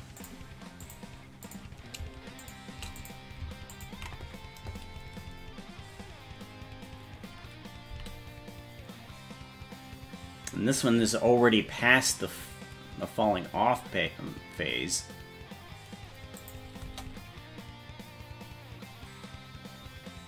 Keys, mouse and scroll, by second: 0.1 click, 0.8 click, 1.4 click, 2.4 shift+click, 2.9 click, 3.7 ctrl+click, 7.9 g, 16.9 space.